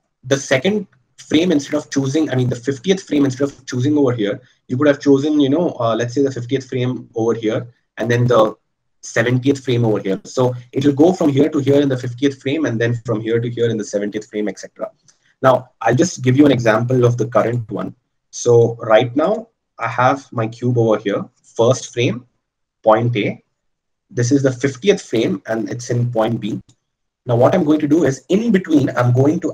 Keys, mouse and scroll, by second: 7.3-12.0 middle drag, 22.5-26.7 drag.